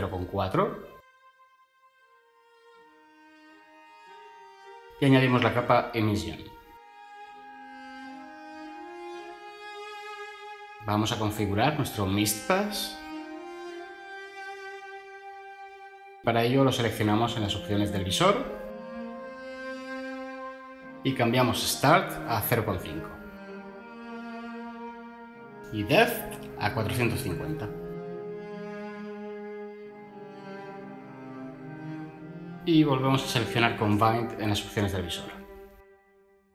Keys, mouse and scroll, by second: 23.8 5, 24.1 Return, 28.2-28.6 typing.